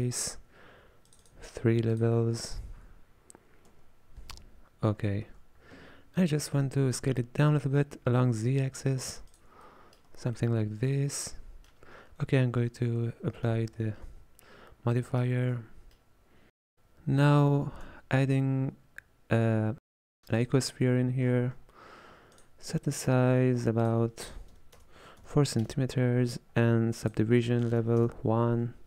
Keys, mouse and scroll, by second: 4.6-5.0 scroll up 2, 5.3 Tab, 5.8-6.5 scroll up 1, 9.7 middle click, 10.1 Tab, 10.5-13.5 middle drag, 13.5 ctrl+a, 14.7-15.1 scroll up 1, 15.1-16.7 shift+middle drag, 17.7 shift+a, 21.4-22.2 scroll down 8, 22.4-28.8 drag.